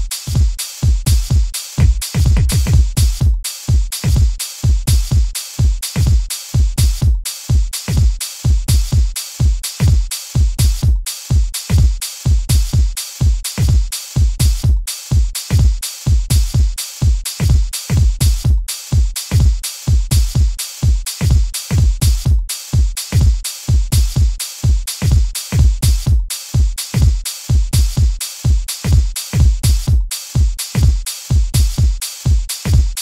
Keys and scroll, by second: 1.4 q, 1.7 w, 3.9 w, 5.9 w, 7.8 w, 9.7 w, 11.6 w, 13.5 w, 15.4 w, 17.3 w.